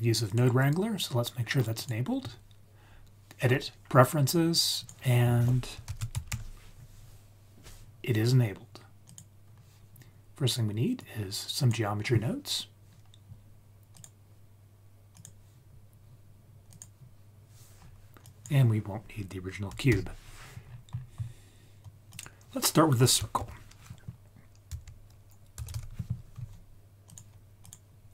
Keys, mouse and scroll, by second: 0.3-2.3 drag, 11.0 click, 13.9-15.2 drag, 16.7 click, 17.5-18.2 scroll down 3, 18.2 drag, 19.8 x, 20.3-22.1 scroll up 7, 22.1 click, 22.1 scroll up 1, 23.3 shift+a.